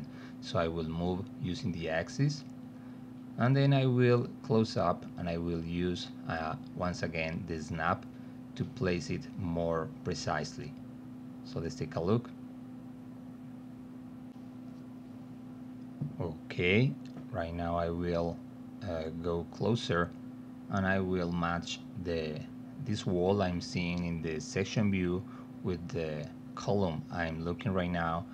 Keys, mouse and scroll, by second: 3.9-5.5 alt+middle drag, 9.6 click, 11.4 middle click, 15.7 space, 22.2-28.3 drag, 24.8 alt+d.